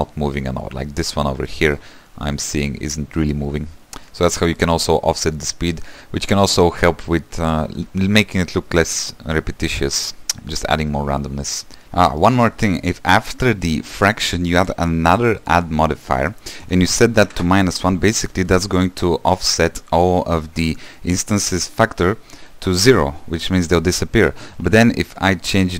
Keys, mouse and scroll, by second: 1.6 shift+middle click, 2.0-3.6 scroll up 6, 3.6-4.3 scroll down 8, 4.3-8.4 shift+middle drag, 10.5-11.8 middle drag, 11.8-13.4 scroll up 1, 13.4-14.8 scroll up 1, 14.8 shift+d, 17.4-25.7 drag.